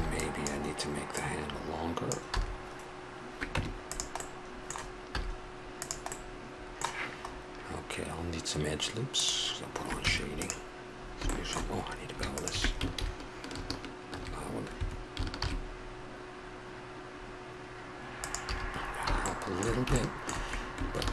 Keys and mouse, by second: 2.3 a, 3.5 Tab, 4.2-5.0 middle drag, 5.0 z, 7.3-8.3 middle drag, 9.1 click, 10.0 Tab, 12.3 click, 13.0 ctrl+v, 15.4 ctrl+b, 18.4 a, 18.8 middle click, 21.0 ctrl+r.